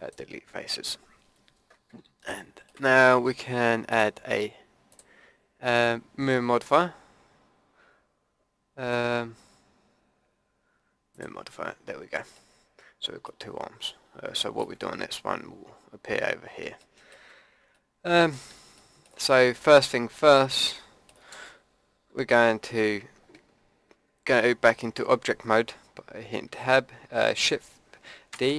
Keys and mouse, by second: 3.9-11.2 drag, 11.8 click, 12.6 click, 22.8 Tab, 28.3 shift+d.